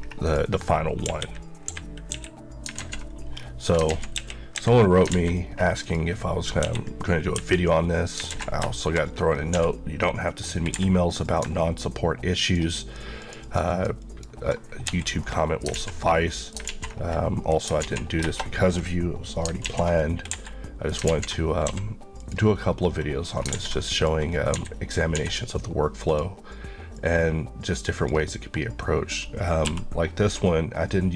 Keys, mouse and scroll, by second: 0.3 click, 0.9 middle click, 1.7 KP_3, 2.1 KP_1, 2.8 alt+z, 3.4-3.8 scroll down 1, 4.0 alt+z, 4.2 KP_1, 4.6 KP_3, 5.2 alt+a, 5.5 scroll up 1, 5.9 click, 6.7 KP_1, 7.4 KP_9, 8.3 alt+z, 8.8 shift+middle click, 9.1 scroll up 1, 9.6 d, 10.8 Escape, 11.1 click, 14.9 Escape, 15.3 middle click, 16.0 scroll down 1, 16.3 middle click, 16.8 alt+z, 17.0-17.7 scroll down 1, 17.9 alt+z, 19.7 alt+z, 20.0 middle click, 20.3 Escape, 20.7 middle click, 21.1 alt+z, 21.7 q, 22.2 click, 23.3 scroll down 1, 23.5 alt+a, 24.0 click, 24.3 scroll, 24.6 scroll up 1, 24.6-25.2 typing, 26.1 click, 29.7 b.